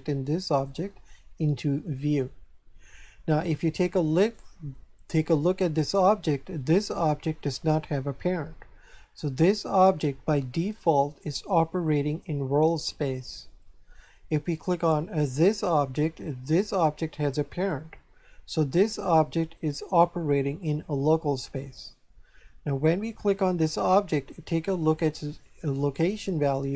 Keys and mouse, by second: 4.2 right click, 15.3 right click, 23.1 right click.